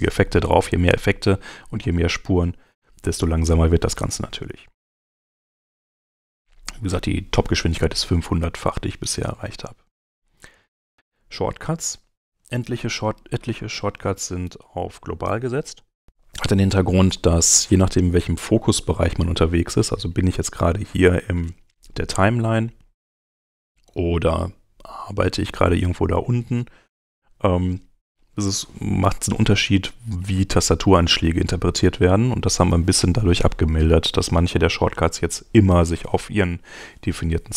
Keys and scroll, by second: 4.6 super+Tab, 18.2 super+Tab, 31.9 super+Tab.